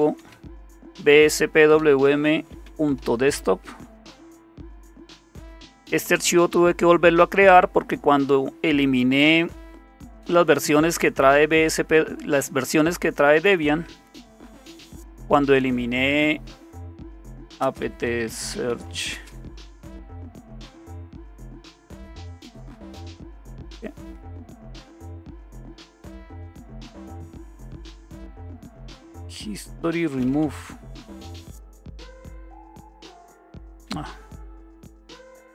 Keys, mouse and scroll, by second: 0.0-4.9 typing, 16.8-19.5 typing, 21.7-31.0 typing, 31.3 Return, 33.5 Up, 34.0 Left, 34.6 Left, 34.7-35.5 typing.